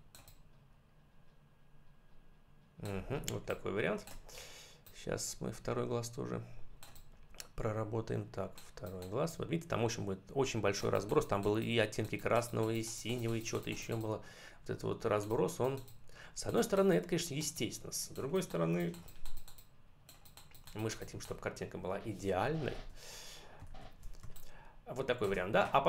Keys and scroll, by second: 3.1 space, 23.6 ctrl+-, 24.1 space.